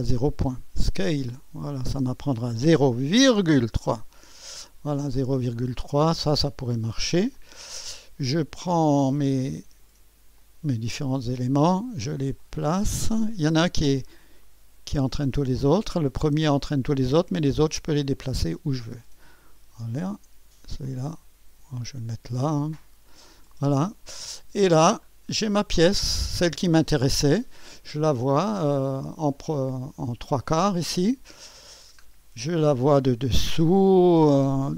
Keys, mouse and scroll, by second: 2.6 KP_0, 3.2 ,, 3.7 KP_3, 5.2-6.7 scroll up 1, 6.7 typing, 7.4-8.4 drag, 7.4-7.8 scroll up 1, 10.4-12.1 drag, 11.0 typing, 12.4-14.1 drag, 14.1-15.3 scroll down 1, 17.9-20.2 drag, 20.9-22.3 drag, 22.3 typing, 24.1-26.0 scroll up 1, 26.1 scroll up 1, 28.2-29.1 scroll up 1, 29.1-30.4 scroll down 1, 31.8-32.9 scroll down 1.